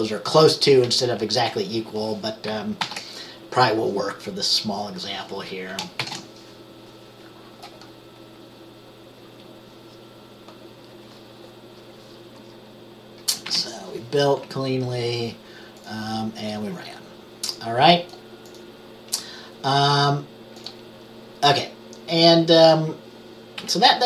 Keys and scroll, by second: 2.9 ctrl+s, 6.1 ctrl+b, 13.5 F5, 23.7 Page_Up.